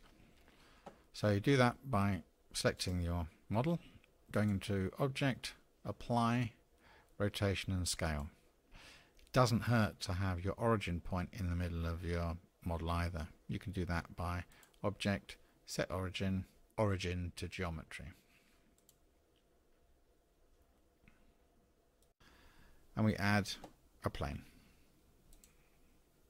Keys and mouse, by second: 4.3-8.3 drag, 14.6-19.2 drag, 25.3-26.2 drag.